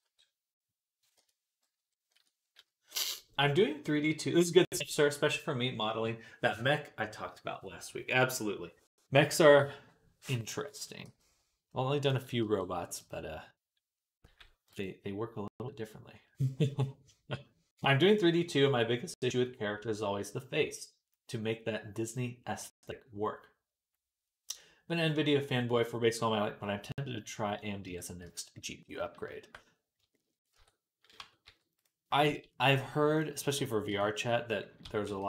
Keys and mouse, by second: 1.6 ., 10.9 g, 12.3 r, 14.1 g, 27.7 Tab, 28.1 z, 30.4 Tab, 31.0 Tab, 31.3 Tab, 31.6 click, 31.7-35.2 middle drag, 32.1 z, 33.7 l, 34.7 s.